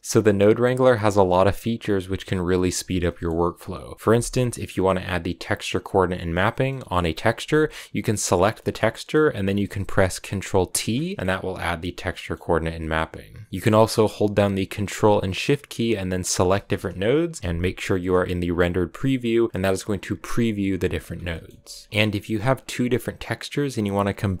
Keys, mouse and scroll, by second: 0.0-5.7 scroll up 1, 10.7 ctrl+t, 16.4-18.3 ctrl+shift+drag, 18.3 z, 19.4-20.8 scroll up 1, 20.8 ctrl+shift+click, 21.9-24.4 scroll up 1.